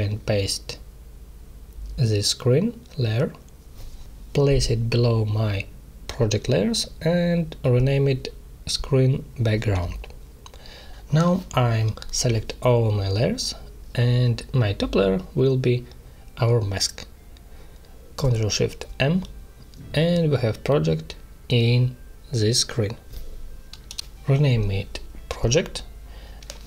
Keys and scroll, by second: 0.3 ctrl+c, 1.3 ctrl+v, 4.8 ctrl+shift+[, 5.1 ctrl+], 7.2 shift+-, 7.7 d, 8.2 BackSpace, 9.6 b, 9.7 g, 9.9 Return, 12.8 ctrl+shift+], 19.5 ctrl+shift+m, 25.3-25.9 typing, 26.4 Return.